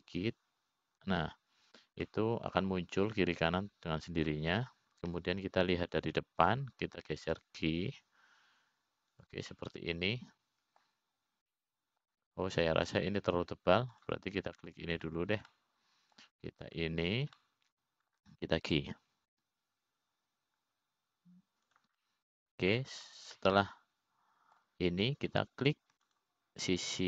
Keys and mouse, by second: 4.6-5.7 middle drag, 6.9 middle click, 9.9 g, 12.1-13.4 middle drag, 14.1 middle click, 16.5 click, 18.1 middle click, 19.2 shift+click, 19.9 middle click, 21.9 g, 24.5 middle click, 25.5 click, 25.9-27.0 middle drag.